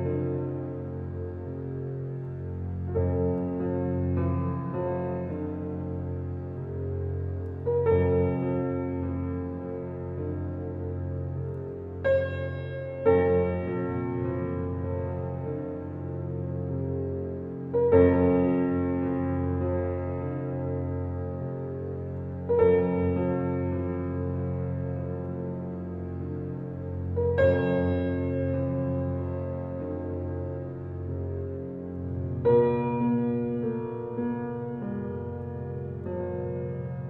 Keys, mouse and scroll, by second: 3.7 click, 4.2 shift+click, 4.6 shift+click, 5.1 shift+click, 5.5 shift+click, 6.1 shift+click, 6.7 shift+click, 7.4 shift+click, 7.7 shift+click, 7.9 scroll down 1, 8.4 shift+click, 8.6 shift+click, 9.7 shift+click, 10.5 shift+click, 11.4 shift+click, 12.2-14.1 drag, 14.1 click, 14.4 scroll down 1, 14.8 click, 15.1 scroll down 2, 15.3-16.2 middle drag, 16.2 click, 16.5 click, 17.2 click, 19.7 click, 20.1-20.5 middle drag, 20.5 scroll up 1, 21.7 click, 22.6-23.6 shift+middle drag, 23.6 scroll up 2, 25.1-26.5 shift+middle drag, 26.5 Tab, 27.4-28.9 shift+middle drag, 29.3 scroll up 2, 29.7 click, 30.9 ctrl+click, 31.7 ctrl+click, 32.8 ctrl+click, 34.5 middle click, 34.9 scroll up 2, 35.6-37.0 middle drag.